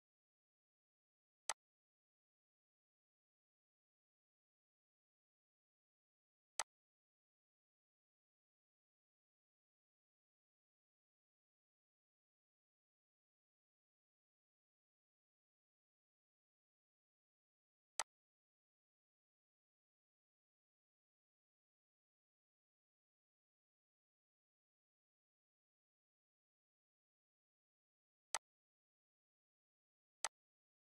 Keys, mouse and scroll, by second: 1.5-13.8 drag, 18.0-28.2 drag, 28.3 click, 28.3 click.